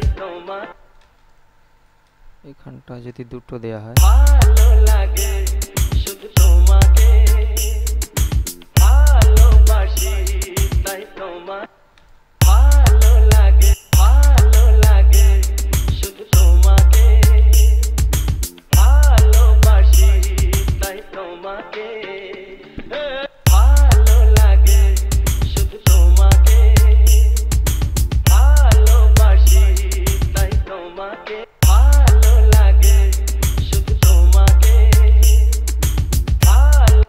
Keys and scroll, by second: 1.0 space, 4.1 space, 11.8 space, 14.1 space, 23.4 space, 31.6 space.